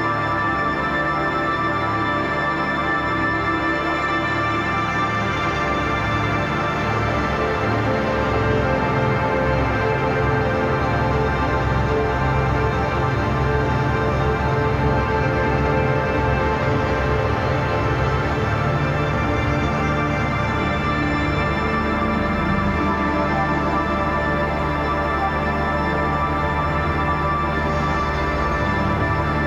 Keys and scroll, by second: 2.7 space, 3.8 space, 6.3 ctrl+z, 8.4 space, 14.2 space, 16.2-18.4 typing, 21.2-25.6 typing, 27.0 ], 27.8 [, 28.2 ].